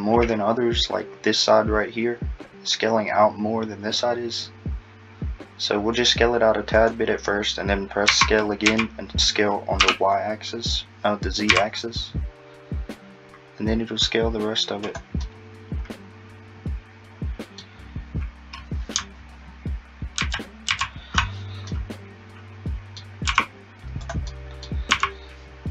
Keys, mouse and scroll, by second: 8.1 s, 15.3 middle click, 17.8-18.3 scroll, 20.2 ctrl+z, 20.7 ctrl+z, 21.3 scroll up 3, 21.7 middle click, 23.3 s, 24.3 middle click, 24.9 s.